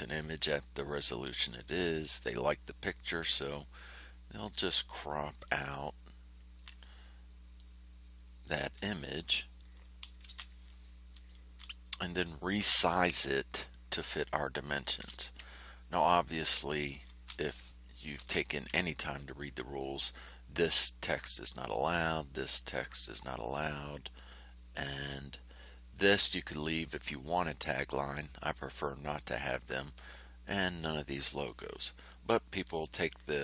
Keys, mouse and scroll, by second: 0.9 ctrl+scroll up 2, 1.5 ctrl+scroll down 2, 3.9-5.6 drag, 5.8-6.5 ctrl+scroll up 4, 7.5-8.6 drag, 8.9-9.4 ctrl+scroll down 4, 10.2 ctrl+shift+c, 10.8 ctrl+shift+click, 14.9 ctrl+shift+c, 18.1 ctrl+shift+a.